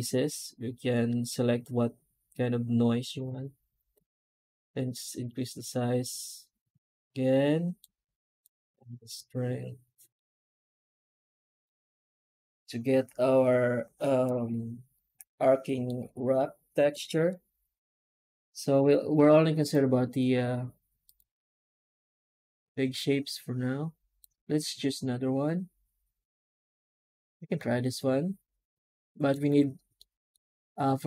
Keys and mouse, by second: 12.5-15.7 middle drag, 18.6 F9, 27.4-29.1 middle drag, 29.8-30.2 middle drag.